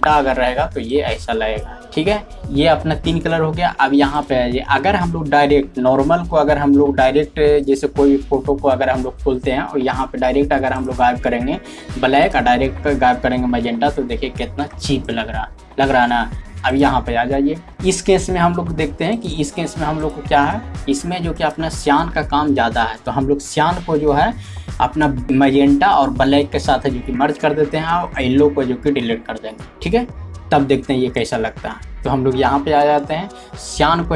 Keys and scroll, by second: 22.0-24.6 typing, 33.2 typing.